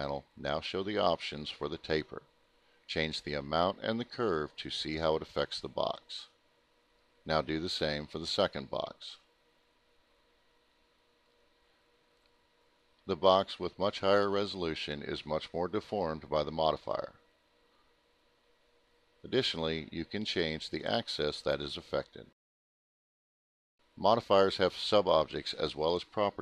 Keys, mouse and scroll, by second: 1.1 click, 4.3 click, 7.7 click, 9.1 click, 10.2 t, 12.2 click, 14.3 click, 16.1 click, 20.5 click.